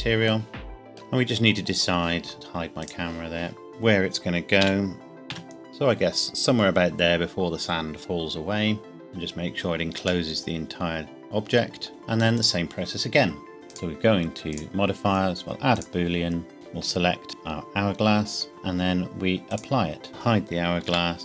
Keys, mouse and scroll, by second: 0.9 shift+middle click, 1.0 scroll down 1, 3.7-4.6 scroll down 1, 4.6 s, 5.3 z, 9.1 click, 9.2-10.2 scroll up 1, 10.2 middle click, 11.7 scroll up 1, 11.9 click, 13.7 click, 19.5 click, 20.9 h, 21.1 Tab.